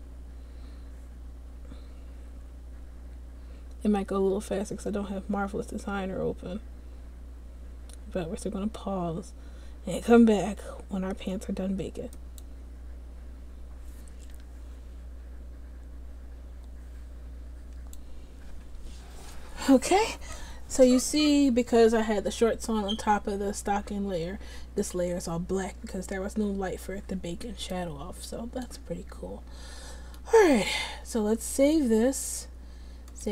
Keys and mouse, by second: 31.6-33.3 drag.